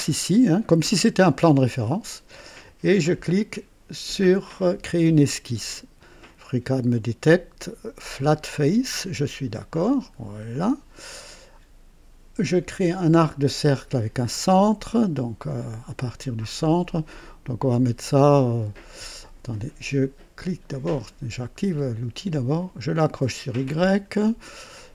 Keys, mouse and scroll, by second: 4.8 click, 8.1 click, 9.2-9.6 scroll up 1, 10.4-11.1 right drag, 20.7 click, 23.0 click.